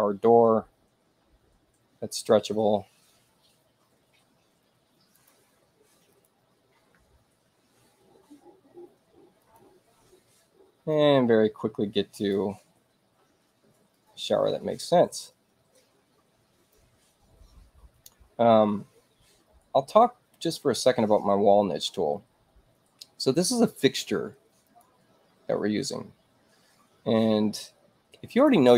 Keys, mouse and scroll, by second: 5.1 click, 6.1 click, 9.4 click, 10.9-12.3 drag, 13.9-16.7 drag, 24.6 click, 28.3 click.